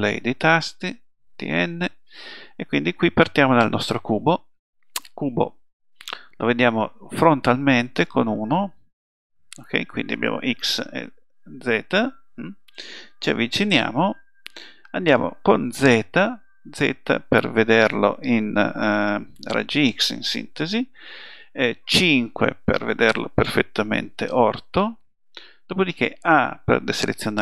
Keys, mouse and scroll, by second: 0.6 t, 1.4 n, 7.6 KP_1, 15.8 z, 22.0 KP_5, 26.3 a.